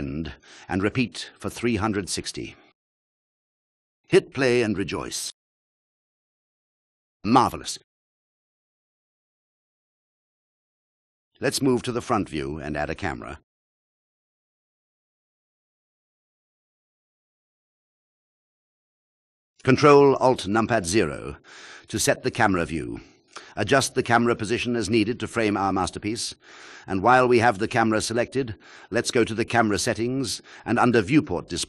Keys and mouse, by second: 1.7 click, 2.5-3.0 alt+drag, 3.3 click, 14.0 KP_1, 16.2 ctrl+click, 19.4 shift+a, 24.4 ctrl+alt+KP_0.